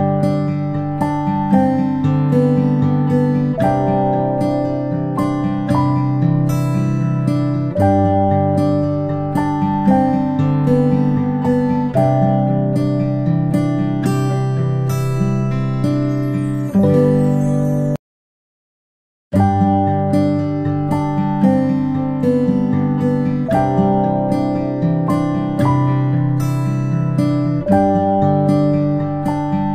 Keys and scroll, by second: 9.6 ctrl+z, 9.7 ctrl+z.